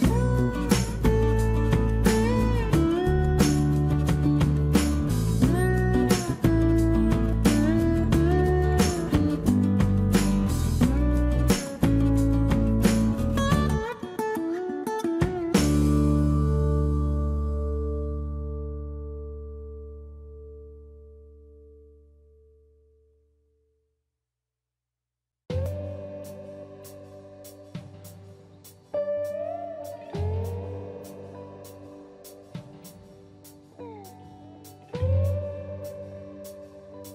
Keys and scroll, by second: 2.9 space, 3.1 Escape, 11.6 m, 16.1 q, 20.2 space, 27.1 space, 30.2 space, 30.3 Escape, 35.1 m.